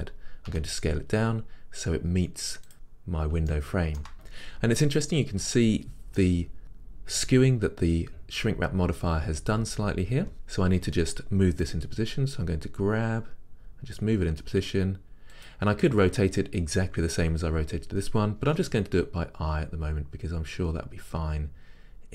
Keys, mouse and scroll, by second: 0.5 s, 2.7 click, 2.9-3.6 scroll up 2, 3.6-15.5 shift+middle drag, 4.1-5.8 scroll up 2, 5.8-11.7 scroll up 1, 11.7 scroll up 1, 11.8-22.1 drag, 11.8 g, 18.6 r.